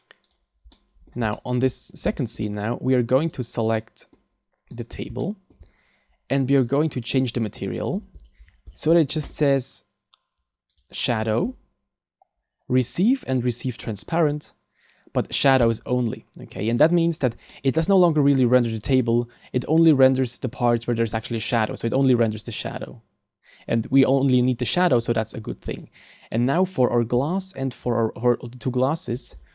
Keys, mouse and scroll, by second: 0.7 middle click, 1.4 shift+middle click, 1.7 scroll up 3, 2.2 shift+middle click, 2.4 middle click, 3.3 right click, 3.8 middle click, 4.2 scroll down 1, 4.7 right click, 5.2 shift+middle click, 6.7 click, 8.2-9.0 scroll down 10, 10.7 click, 11.1-12.2 scroll down 6, 15.6 click, 17.5 middle click, 25.9 right click, 27.5 shift+right click, 29.1-29.5 scroll up 13.